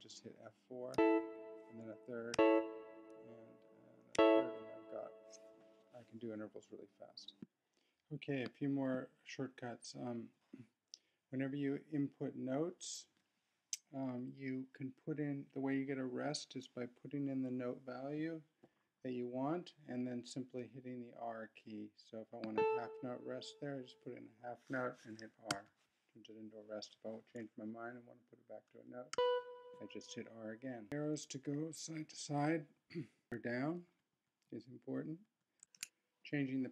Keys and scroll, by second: 0.9 F4, 2.3 F3, 27.7 r, 29.7 r, 30.8 Right, 31.3 Left, 31.9 Right, 32.7 Left, 33.2 Right, 33.3 Down, 33.8 Up, 34.4 Down, 35.2 Up, 35.6 shift+super+p.